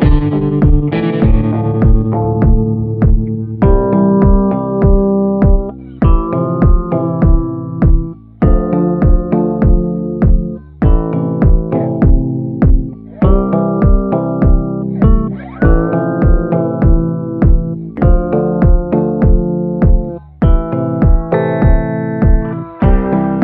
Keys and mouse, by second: 0.6 shift+middle click, 1.6 middle click, 2.3 shift+middle click, 7.6 click, 9.0 click, 9.5 click, 11.4-12.7 typing, 11.8 click, 12.4 ctrl+z, 12.8-13.9 drag, 15.0 click, 15.3 [, 15.6 [, 15.8 click, 15.8 [, 16.7 ctrl+z, 16.8 ], 17.1 click, 18.6 click, 19.3 ], 19.4 ], 19.5 ], 19.7 click, 20.7 click, 22.2 click, 23.1 click.